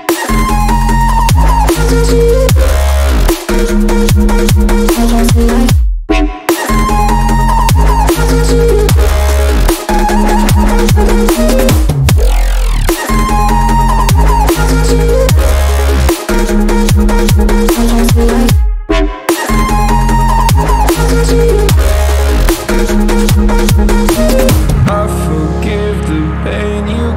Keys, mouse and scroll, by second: 2.7-5.4 drag, 5.4 g, 10.2 ctrl+a, 12.8-14.2 drag, 15.0-16.2 drag, 23.2-25.2 drag.